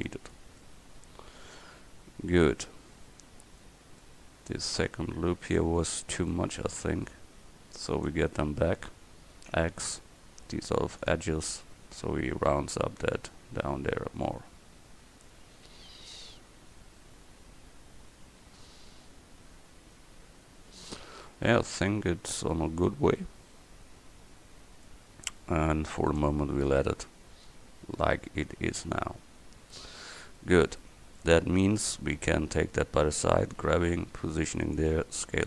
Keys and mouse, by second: 5.7 Tab, 9.6 x, 11.9 Tab, 29.0 KP_1, 33.5 g, 35.0 s.